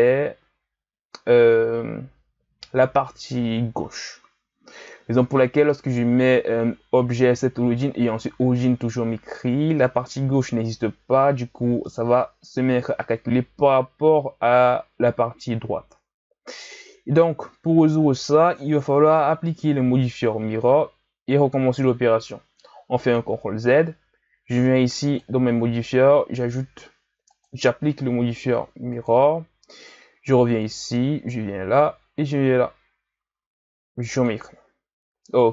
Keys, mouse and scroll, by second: 23.2 ctrl+z, 25.1-30.3 drag, 30.6-33.6 drag.